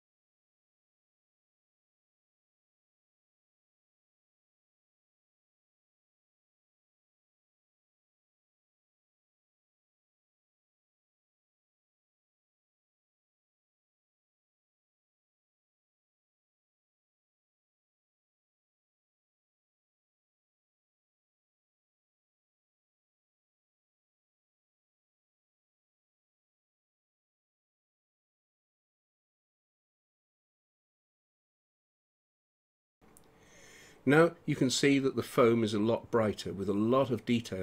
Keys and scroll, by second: 0.7 space, 3.4 space, 7.0 space, 10.1 space, 11.2 space, 12.5 space, 13.9 space, 14.8 space, 15.6 space, 16.1 space, 20.8 space, 22.7 space, 23.2 [, 25.6 space, 28.7 ctrl+0.